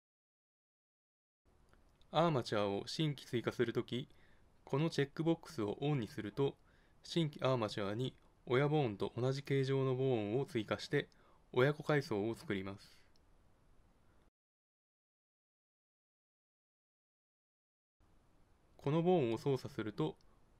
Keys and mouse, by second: 1.6-6.3 drag, 7.9-9.7 drag, 10.9 click, 12.5 Tab, 14.8 click, 14.9 Tab, 15.9 ctrl+Tab, 17.2 click, 17.2 right click, 17.6 g, 17.8 click, 19.3 g.